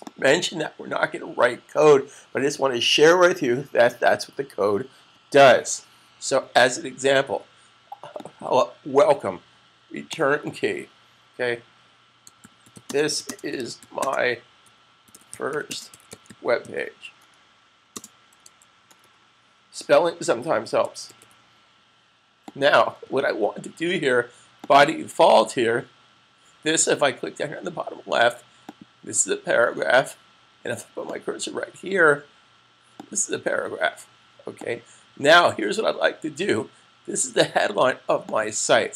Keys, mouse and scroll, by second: 8.1 click, 10.5 click, 11.7-18.9 typing, 20.2-23.2 typing, 22.3 click, 24.5 click, 28.5 click, 30.9 click, 38.0 click.